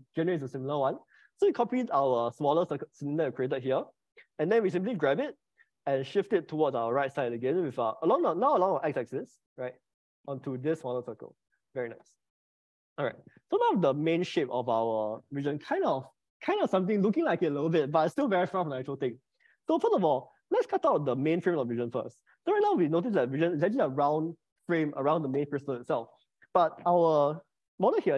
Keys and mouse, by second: 5.0 g, 8.1 x, 12.9 click, 14.3-21.6 middle drag, 21.9 click, 27.6-28.1 middle drag.